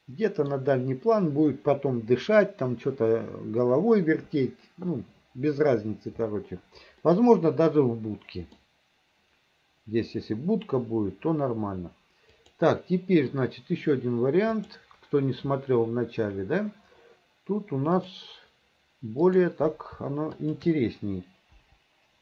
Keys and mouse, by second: 7.2-8.7 middle drag, 12.5-15.2 drag, 18.1 click, 19.3 click, 20.5 shift+click, 21.7 Delete.